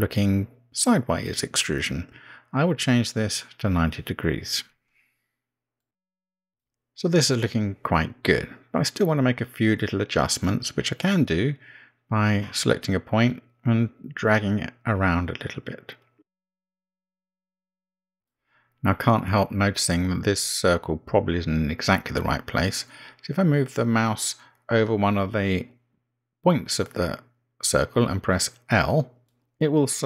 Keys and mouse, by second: 0.6 BackSpace, 0.9 BackSpace, 1.1 BackSpace, 2.2 Right, 2.4 Right, 3.7 BackSpace, 4.0 BackSpace, 12.7 click, 15.2 g, 18.2 Tab, 21.3 Tab, 22.0 Tab.